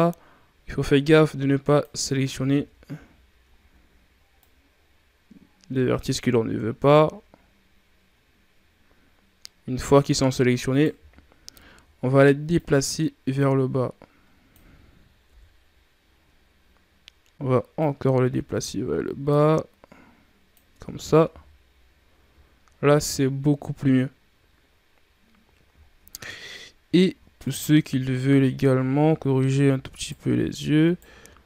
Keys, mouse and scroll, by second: 10.8 z, 11.5 ctrl+scroll down 3, 12.4-15.1 drag, 15.1 KP_1, 16.2 scroll down 6, 17.6-20.6 drag, 20.6 Tab, 21.1 a, 21.6-22.4 scroll down 2, 22.4-24.1 shift+scroll up 7, 24.1-24.9 scroll down 1, 24.9 scroll down 4, 25.6-26.2 shift+scroll up 10, 26.7 shift+scroll up 2, 27.3 right click, 27.7 Tab, 28.3-29.1 shift+scroll up 3, 29.8 alt+right click, 30.7 alt+right click.